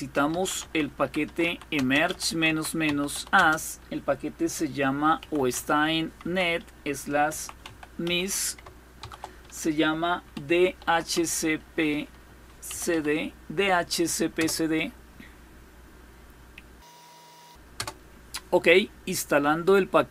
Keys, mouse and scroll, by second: 0.0-3.2 typing, 4.6-8.6 typing, 9.8-13.0 typing, 14.0 Return, 17.4 Return.